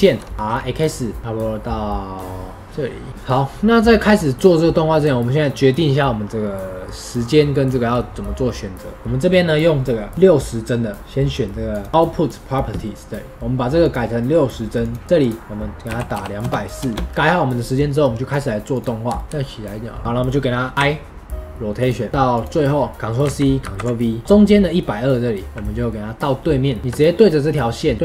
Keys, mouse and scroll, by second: 0.0-1.2 right drag, 0.0 shift+middle click, 1.2 r, 4.6-11.9 drag, 13.7-17.0 drag, 18.7-19.1 drag, 19.1 shift+middle click, 19.2 r, 20.7 i, 22.3 click, 22.9 middle click, 23.2 ctrl+c, 23.6 ctrl+v, 24.2-26.8 drag, 26.8 r.